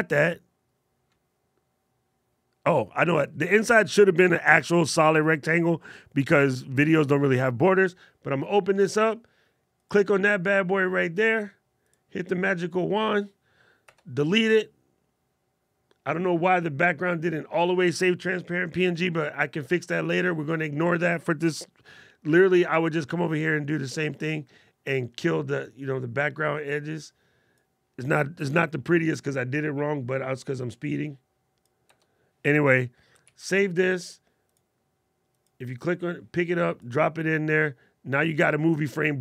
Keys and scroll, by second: 32.9 super+s.